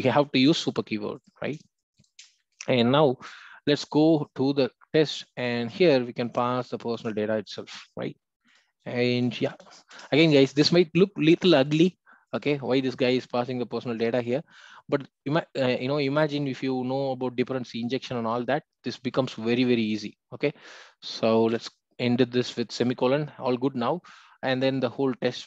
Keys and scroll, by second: 7.1 Return.